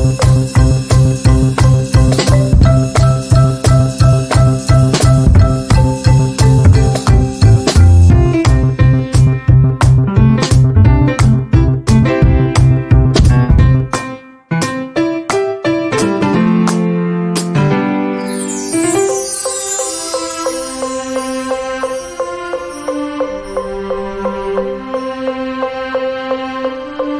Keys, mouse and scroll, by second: 0.0-1.3 drag, 2.4 F6, 3.2-6.0 drag, 7.0-8.4 right drag, 8.4 click, 10.6 ctrl+q, 11.1-15.2 drag, 15.2-15.7 shift+scroll down 1, 16.4 z, 16.9-18.5 drag, 20.1-23.0 drag, 23.0 z, 23.2-27.1 drag.